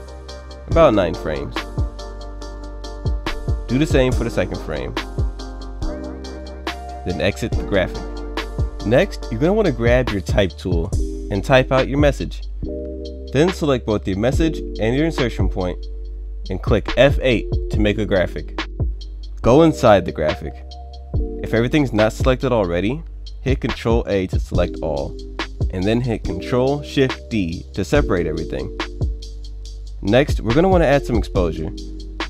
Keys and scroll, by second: 16.8 F8, 23.3 ctrl+a, 26.1 ctrl+shift+d.